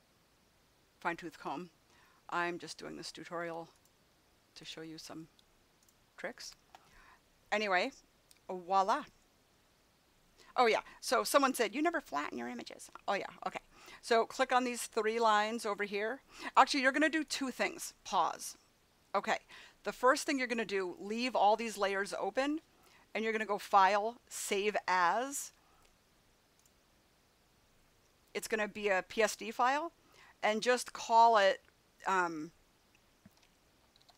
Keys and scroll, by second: 33.7-34.1 typing.